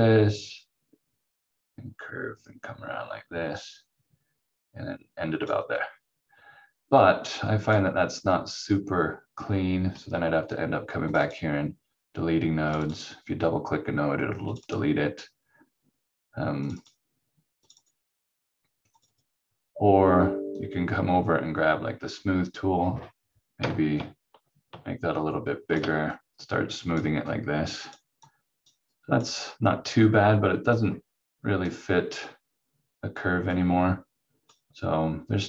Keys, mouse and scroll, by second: 11.1 click, 24.0 shift+click.